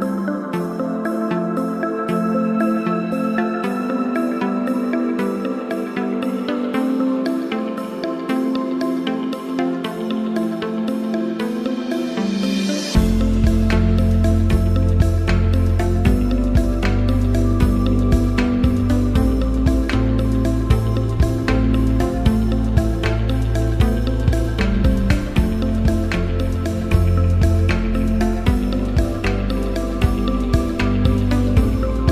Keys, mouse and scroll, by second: 0.6-1.6 typing, 2.4-3.1 drag, 3.8 0, 4.5 Tab, 4.8 0, 6.6 click, 11.0 click, 12.9 click, 17.3-20.2 alt+shift+drag, 27.3 click, 29.7 click, 30.0-30.9 alt+shift+drag.